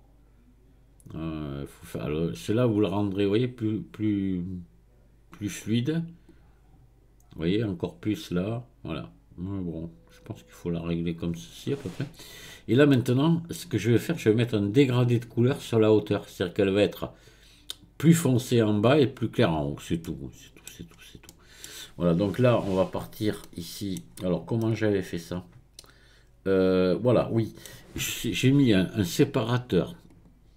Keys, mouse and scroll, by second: 6.3-9.3 drag, 12.0-12.9 scroll down 2, 12.9-14.1 middle drag, 14.1-15.2 scroll up 2, 15.2-17.2 scroll up 1, 19.6-20.0 scroll down 3, 20.0 middle click, 20.9-21.3 scroll up 1, 21.3-24.4 middle drag, 30.1-30.5 drag.